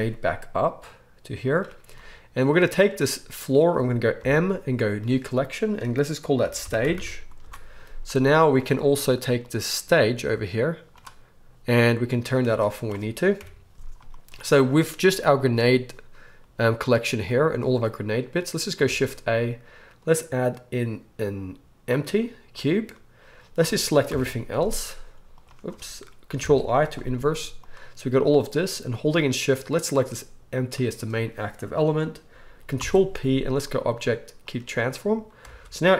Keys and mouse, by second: 2.8 click, 2.9-4.2 middle drag, 4.2 m, 9.4 click, 10.0 click, 12.0 click, 13.3 KP_1, 15.3 click, 18.8 shift+a, 24.0 ctrl+o, 25.5-26.5 middle drag, 26.3 ctrl+i, 27.1 g, 29.7 shift+click, 32.7 ctrl+p, 35.4 alt+a, 35.5-35.9 alt+middle drag.